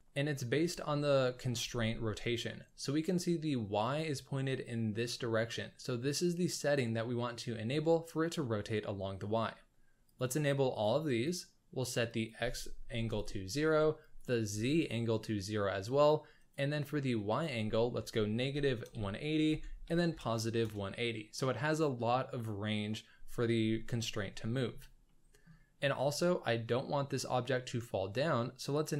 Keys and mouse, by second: 0.3-0.6 middle drag, 0.9 shift+middle click, 1.6 z, 10.0 click, 10.7 click, 12.1-13.1 drag, 14.0 click, 16.4-20.6 drag, 24.2-24.7 middle drag, 25.0-25.4 shift+middle drag, 28.7 click.